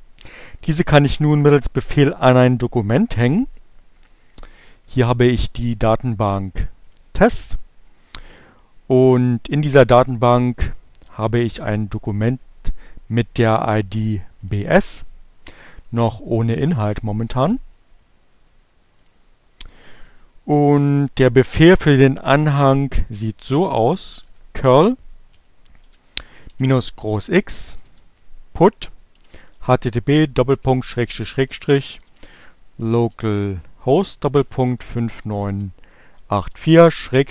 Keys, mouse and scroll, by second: 3.6-4.6 drag, 6.1 click, 13.2 click, 18.5 click, 23.0-24.0 typing, 25.8-36.1 typing.